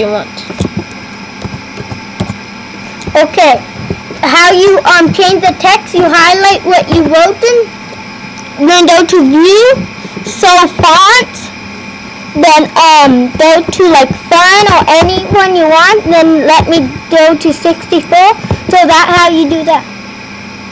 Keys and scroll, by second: 0.0-2.8 typing, 4.2 typing.